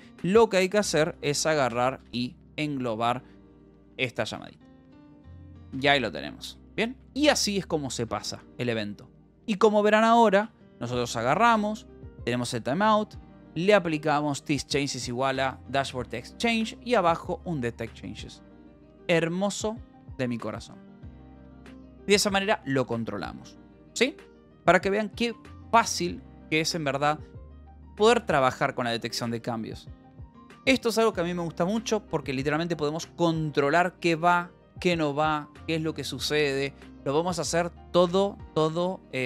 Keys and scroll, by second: 0.8 z, 1.1 a, 1.7 [, 2.5 ctrl+s, 3.5 i, 3.8 BackSpace, 4.1 Right, 4.7 Right, 5.3 Left, 5.6 BackSpace, 6.3 ctrl+s, 6.4 j, 6.7 h, 10.9 shift+l, 11.2 Down, 11.7 Down, 12.5 Up, 13.8 shift+v, 16.4 Escape, 16.7 Down, 17.5 shift+v, 22.1 Escape, 22.9 ctrl+s, 25.1 k, 26.3 l, 27.5 v, 28.1 Escape, 28.5 j, 29.3 k, 29.7 j, 30.8 shift+v, 39.1 Escape.